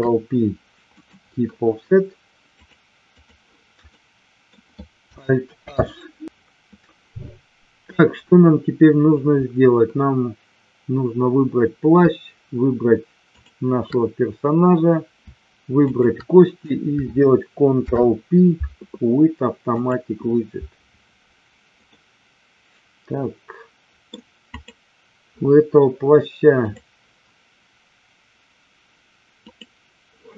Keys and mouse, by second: 2.6-3.4 drag, 4.0-4.5 middle drag, 5.8 alt+h, 15.9 shift+click, 17.8 ctrl+p, 21.9-24.0 middle drag, 24.4 click, 26.6 click, 29.3 click.